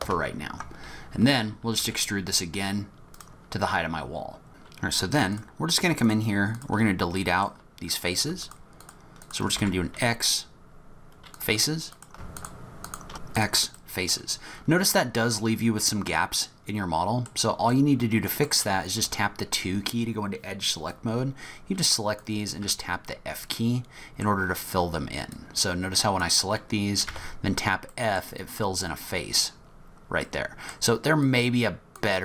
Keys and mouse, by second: 1.8 e, 4.5 ctrl+z, 5.3 shift+click, 7.2 click, 8.4 shift+middle click, 9.2 shift+middle click, 9.6 x, 13.1 x, 13.8 click, 15.8 click, 16.0-17.3 middle drag, 17.7 middle click, 19.0 2, 21.0-22.2 drag, 22.6 f, 23.6 middle click, 25.3 click, 27.1 f, 27.9 click, 30.2 click, 31.4 click.